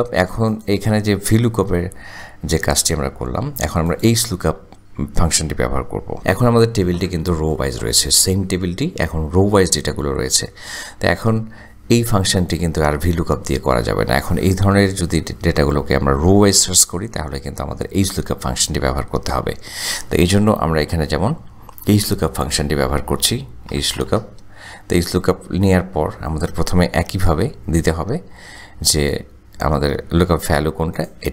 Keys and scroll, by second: 6.2 Delete, 21.1 =, 23.8-24.6 typing, 25.6 Tab.